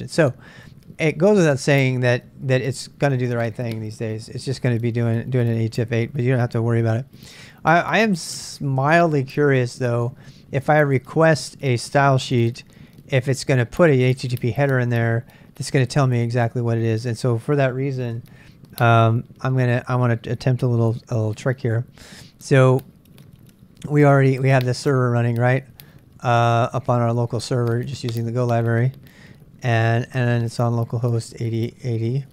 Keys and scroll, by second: 20.5 ctrl+a, 20.9 typing, 23.6-28.3 typing, 29.7-32.3 typing.